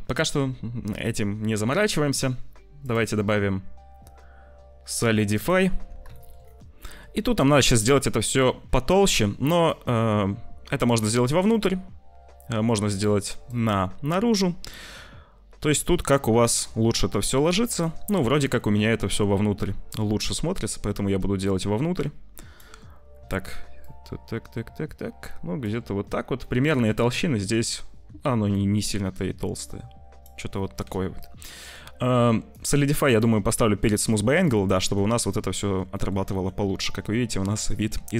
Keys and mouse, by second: 2.7-5.4 middle drag, 6.1 shift+middle click, 6.8 middle click, 9.5-10.9 shift+middle drag, 11.6 middle click, 13.4-16.7 shift+drag, 16.7-17.7 shift+middle drag, 18.0 middle click, 19.9-22.4 shift+middle drag, 23.7-25.6 shift+drag, 26.3 click, 28.6-30.1 shift+drag, 30.8 ctrl+s, 32.4 click, 34.1 click, 34.7 click, 35.3 click, 36.0 click, 36.2 ctrl+s.